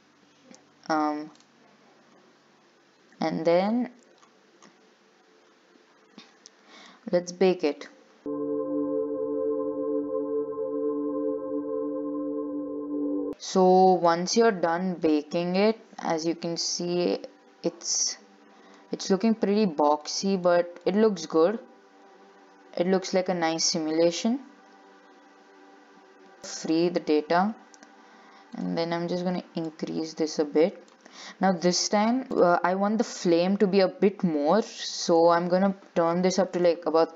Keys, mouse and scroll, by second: 0.0-1.7 scroll up 2, 1.7 click, 2.2-2.7 scroll up 1, 2.7-3.9 scroll up 3, 3.9-6.5 scroll up 11, 6.5-7.8 scroll up 3, 7.8-13.1 drag, 13.1 shift+middle click, 13.2 scroll up 2, 13.3-14.3 middle drag, 14.3 click, 14.6 scroll down 5, 14.9 shift+middle click, 15.3 scroll up 5, 16.8-18.3 drag, 18.3-19.4 middle drag, 19.4 scroll up 1, 19.7-20.0 scroll down 2, 20.4 shift+middle click, 21.1 scroll up 2, 21.2-24.1 middle drag, 26.5-28.8 drag, 29.8 click, 31.6-32.3 scroll up 3, 32.3 click, 35.3-37.1 drag.